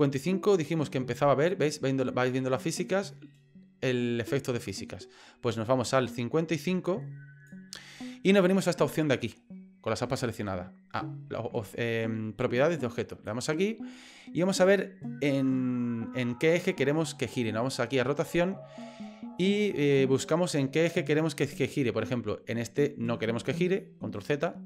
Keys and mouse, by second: 13.2 click, 21.4-23.5 drag.